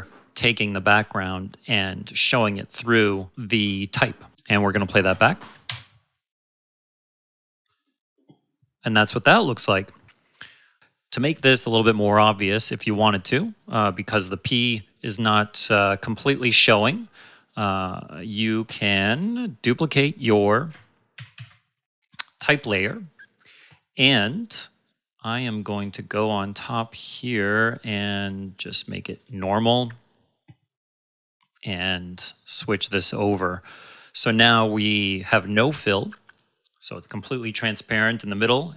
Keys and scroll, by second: 5.6 space, 20.7 ctrl+Num_Lock, 21.1 ctrl+c, 21.3 ctrl+v.